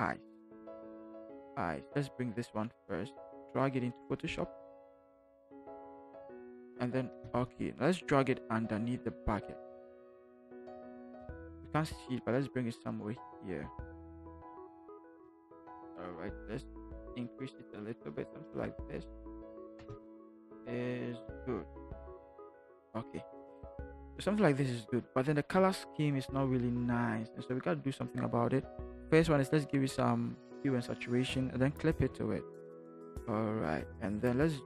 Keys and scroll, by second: 7.1 Return, 11.2 v, 15.5 ctrl+t, 19.8 Return.